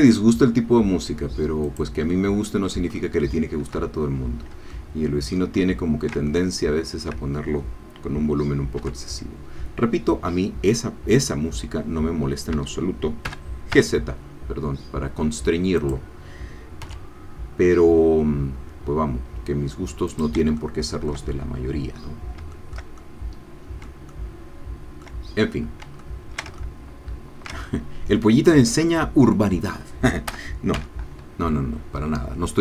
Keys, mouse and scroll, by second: 1.7 click, 2.1 middle click, 3.0-4.0 shift+middle drag, 4.0 shift+scroll up 2, 4.7-6.2 ctrl+middle drag, 6.3 ctrl+shift+middle click, 6.3 ctrl+shift+click, 6.8 shift+middle click, 7.7-9.8 drag, 8.8 g, 12.5 Escape, 13.3 g, 13.7 z, 15.8 click, 16.8 s, 20.1 click, 20.5 shift+click, 22.5-24.0 shift+middle drag, 24.1-25.2 shift+middle drag, 25.6 scroll up 1, 26.0-29.3 shift+middle drag, 30.3 g, 30.7 z.